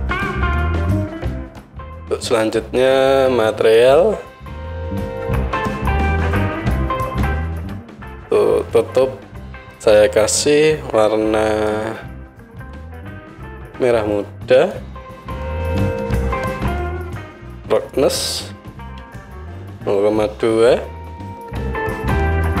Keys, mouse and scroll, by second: 3.6 middle click, 3.8-6.8 right drag, 6.8 middle click, 6.9-8.4 right drag, 8.4-9.8 middle drag, 9.8-17.8 right drag, 17.8-22.6 middle drag, 21.9 right click.